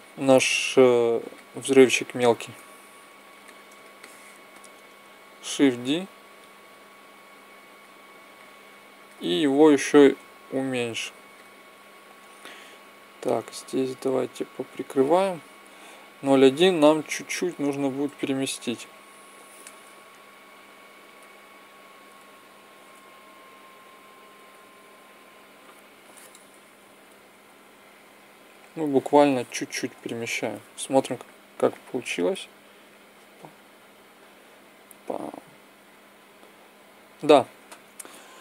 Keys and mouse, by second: 1.1-2.3 middle drag, 2.3 KP_1, 5.7 shift+d, 7.1 click, 9.5 s, 12.8-16.7 drag, 16.7-18.0 middle drag, 18.0 click, 19.6 b, 22.2 a, 22.7 b, 26.5 g, 31.5-33.5 drag.